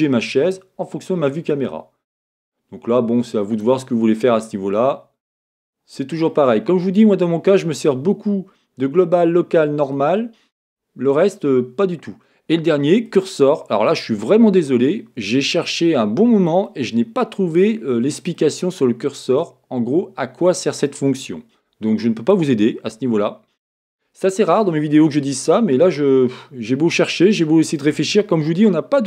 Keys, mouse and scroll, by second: 4.3 middle click, 4.6 middle click, 5.0 middle click, 5.4 middle click, 14.1-22.3 middle drag, 17.8-18.3 scroll up 1, 22.9-23.3 scroll, 24.6-29.0 middle drag.